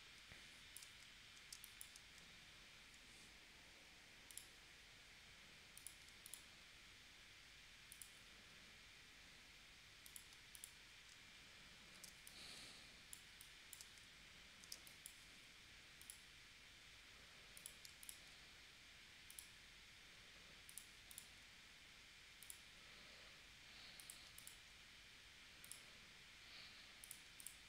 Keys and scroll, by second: 1.5 space, 12.1 space, 14.8 space.